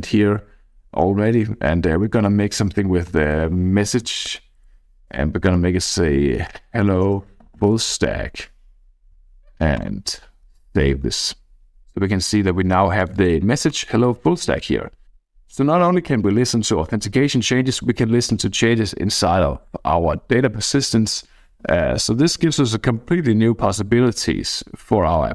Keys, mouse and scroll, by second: 2.2-4.0 typing, 4.1 Tab, 4.3 Tab, 6.2-8.6 typing, 9.7 click, 13.0-14.1 drag, 14.4-17.8 drag.